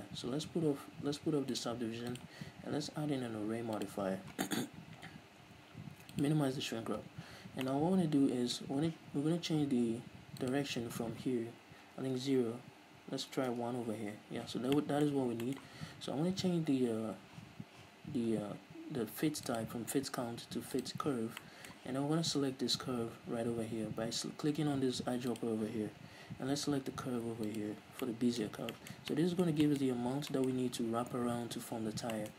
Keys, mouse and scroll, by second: 7.8-10.6 middle drag, 10.6-14.9 drag, 13.8 Return, 14.9-19.6 middle drag, 17.1-19.6 scroll up 2, 19.6-21.5 drag, 21.5-25.5 middle drag, 25.5-28.2 drag, 28.2-32.3 middle drag, 28.7 scroll down 2.